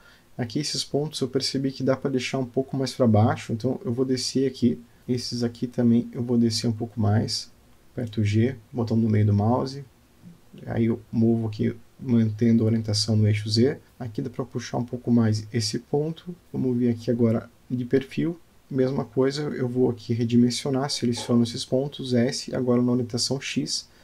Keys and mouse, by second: 0.5 g, 4.2 Tab, 5.3 click, 6.0 alt+click, 7.4 Tab, 8.4 g, 12.4 click, 13.0 click, 13.4 g, 16.1 Tab, 16.5 click, 17.9-19.3 middle drag, 19.8 click, 20.4 Tab, 21.6 click, 23.4 s.